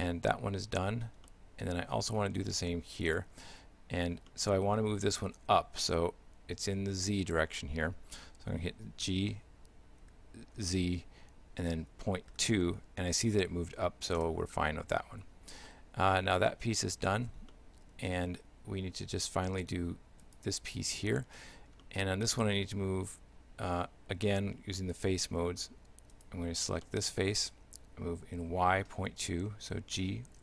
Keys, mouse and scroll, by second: 1.3 shift+middle click, 3.1 right click, 4.3 shift+middle click, 9.1 g, 15.7 shift+middle click, 16.9 Tab, 17.5 shift+middle click, 20.3 right click, 21.9 shift+middle click, 23.4 Tab, 24.8 shift+middle click, 26.2 right click, 26.9 shift+middle click, 30.0 g.